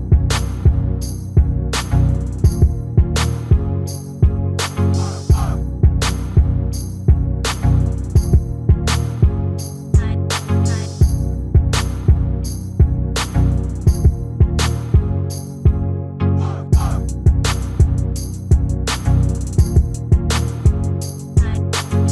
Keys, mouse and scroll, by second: 0.7-2.1 right drag, 2.2 right click, 2.3-4.1 drag, 2.8-4.6 middle drag, 4.5 Tab, 4.8-9.0 middle drag, 8.3 a, 9.0 a, 11.2 Tab, 13.0-15.6 right drag, 16.4-18.2 drag, 17.0-21.1 middle drag, 17.8 Tab, 20.5-22.1 right drag.